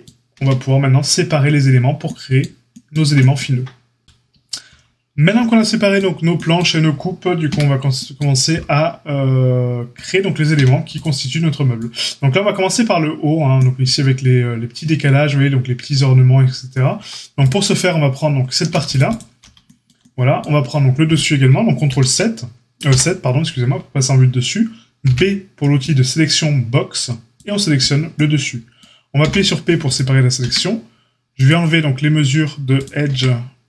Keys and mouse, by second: 0.3 Tab, 7.4 Tab, 9.9-17.4 drag, 10.9 a, 17.4-18.8 middle drag, 18.8 alt+shift+click, 18.9 alt+shift+middle click, 19.0 alt+shift+click, 19.1-32.5 alt+shift+middle drag, 21.8 ctrl+KP_7, 22.8 KP_7, 25.9 b, 29.2 p, 30.4 Tab, 31.4-32.8 drag, 32.8-33.6 middle drag, 33.0 Tab.